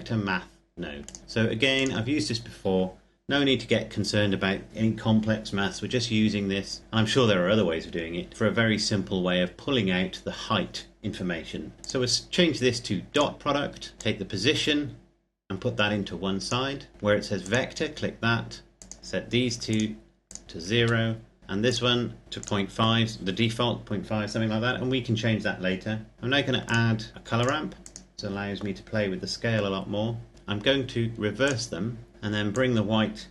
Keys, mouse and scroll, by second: 1.0 click, 11.7 click, 19.0 KP_0, 19.6 click, 20.5 KP_0, 21.4 click, 26.3 click, 27.2 click, 30.3 click.